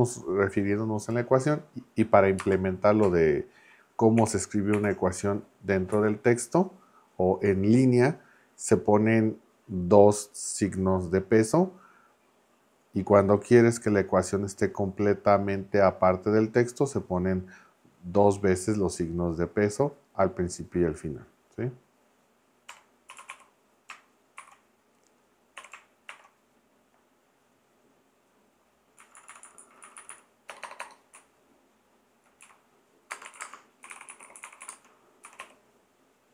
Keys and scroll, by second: 2.4 space, 4.2 shift+4, 5.9 Left, 22.4-24.4 typing, 25.6 y, 26.1 shift+], 29.0 Left, 30.5 BackSpace, 31.1 Right, 32.6 Right, 33.0-35.9 typing.